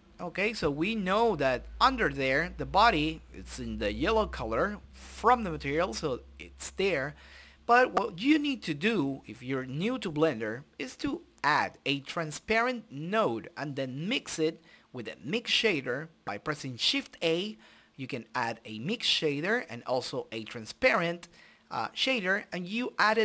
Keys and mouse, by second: 0.1 shift+z, 1.1 shift+z, 1.6 shift+z, 2.2-3.7 drag, 3.9 click, 4.2 middle click, 4.8 click, 7.1-8.2 drag, 7.4 shift+a, 10.9-12.2 middle drag, 12.6-13.7 right drag, 13.4-17.5 drag, 18.1-19.2 drag, 18.9-20.4 middle drag, 20.4-23.2 drag.